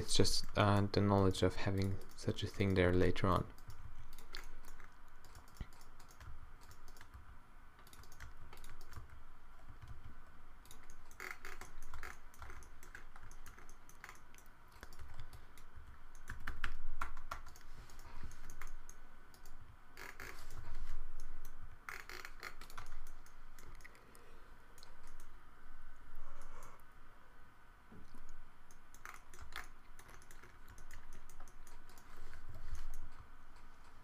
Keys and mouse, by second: 1.8 g, 2.8 g, 3.7 g, 4.5 middle click, 6.3 d, 7.2 d, 8.6 d, 9.0 d, 9.7 g, 12.0 Tab, 12.5 Tab, 15.0 a, 15.2 b, 15.8-16.7 q, 17.1 Tab, 17.4 Tab, 18.1 -, 19.6 g, 20.6 o, 21.6 g, 22.8 Tab, 23.5 click, 23.8 middle click, 24.1 click, 24.3-25.5 middle drag, 29.5 Tab, 32.5 o, 33.1 g.